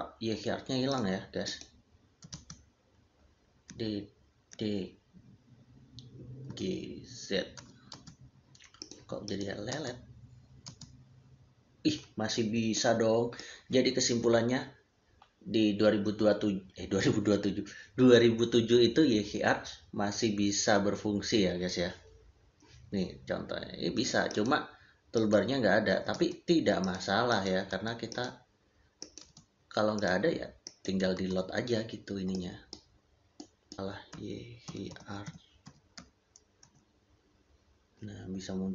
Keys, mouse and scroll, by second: 0.8 click, 2.1 e, 2.2 space, 3.5 d, 7.8 space, 8.6 click, 25.9 e, 26.0 space, 26.7 click, 27.6 space, 28.0 click, 29.1 space, 29.8 click, 31.0 space, 32.2 middle click, 34.0 Return, 36.5 Return, 36.5 h.